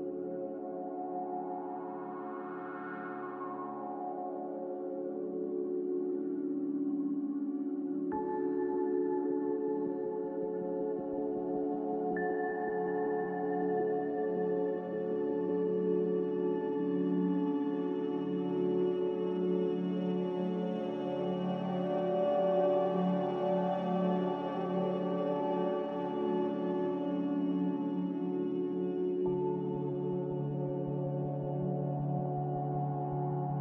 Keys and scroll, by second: 3.9 a, 8.9 q, 21.0 s, 24.1 a, 26.9 a, 29.8 F9, 29.8 z.